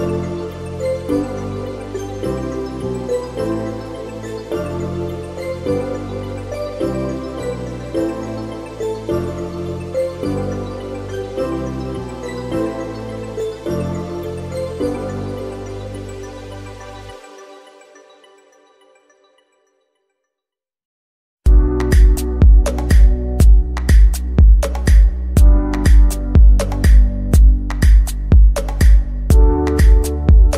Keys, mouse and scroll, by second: 1.1 KP_7, 2.4 shift+d, 3.7 r, 6.1 g, 7.8 shift+d, 8.9 r, 10.4 g, 11.8-12.6 middle drag, 12.6 KP_0, 13.6-14.5 scroll up 4, 14.5 scroll up 3, 18.0-19.3 drag, 21.8 scroll down 2, 23.3-26.4 drag, 27.5-28.6 scroll down 2, 28.6-30.5 drag.